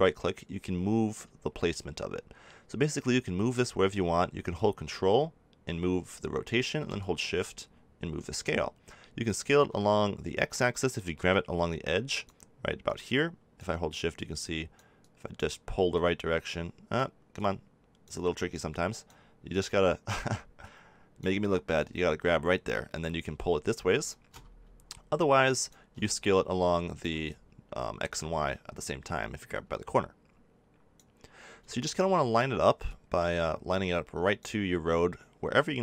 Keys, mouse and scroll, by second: 6.9-8.9 drag, 11.3-34.7 drag.